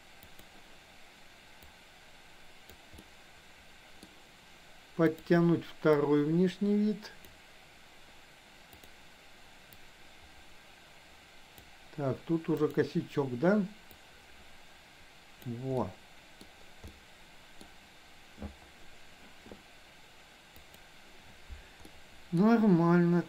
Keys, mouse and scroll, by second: 0.3 click, 1.8-2.8 drag, 3.0-4.1 middle drag, 6.0-8.9 drag, 9.9-11.6 drag, 14.0-15.5 drag, 15.8 middle click, 16.9 middle click, 21.9 middle click.